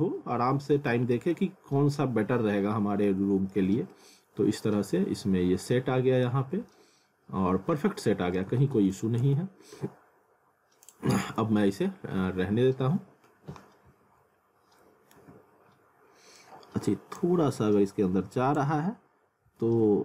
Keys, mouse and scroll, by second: 1.1 scroll up 1, 1.3 alt+middle click, 3.9 alt+middle click, 6.5 scroll down 1, 6.7 alt+middle click, 8.5 w, 9.2 z, 10.8 click, 11.5 w, 14.4 scroll up 1, 15.2 ctrl+z, 15.6 scroll up 1, 17.2 click, 18.8-19.5 scroll down 1, 19.7 ctrl+z.